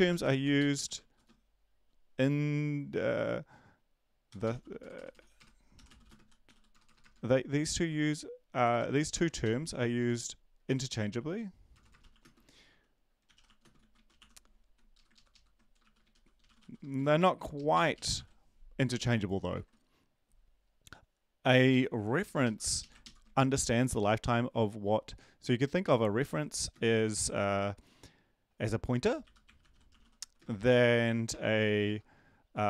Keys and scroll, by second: 0.0-1.5 typing, 4.0-17.7 typing, 14.9 Left, 17.6 Left, 19.5 ctrl+`, 22.2 Left, 22.8 Left, 29.5-30.7 typing, 31.8 BackSpace.